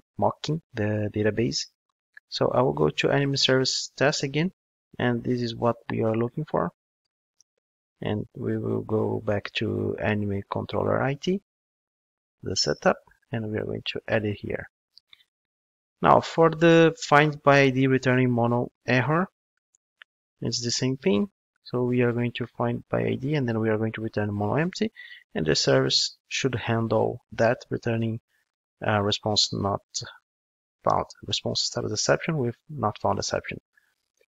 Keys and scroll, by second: 7.3 super+c, 13.4 super+v.